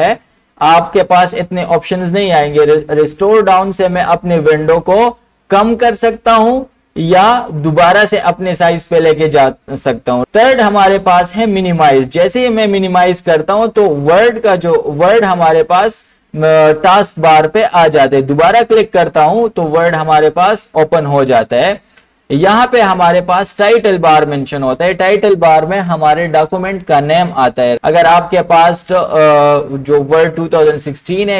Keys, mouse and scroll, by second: 4.2 click, 7.8 click, 12.2 click, 18.3 click.